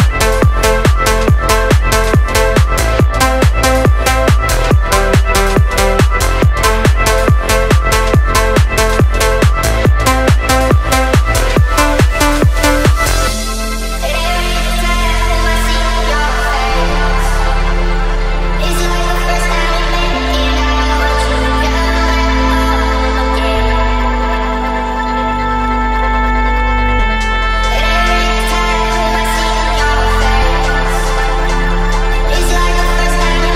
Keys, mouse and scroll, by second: 0.0 click, 0.4 click, 1.1 shift+a, 3.6-8.5 drag, 9.8 click, 13.4 click, 16.3-20.6 drag, 21.5-21.8 drag, 22.7 click, 24.0 click, 25.1-26.1 drag, 26.9 click, 27.6 click, 28.4 click, 29.0 shift+a, 32.8 click.